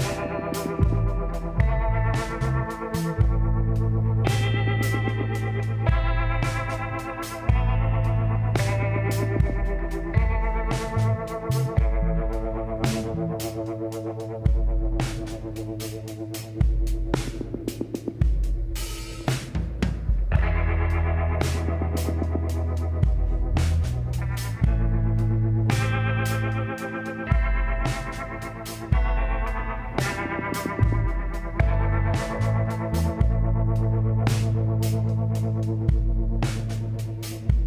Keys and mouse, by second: 2.1-5.4 middle drag, 5.4-8.8 drag, 8.0 x, 10.2 click, 10.9 l, 11.8 ctrl+i, 12.5 h, 15.1-18.1 middle drag, 18.1-20.2 drag, 20.2-21.4 middle drag, 21.3 s, 23.8-26.2 drag, 28.2-31.5 middle drag, 32.2-35.0 drag, 33.7 x, 36.9 middle click, 37.4-37.6 drag.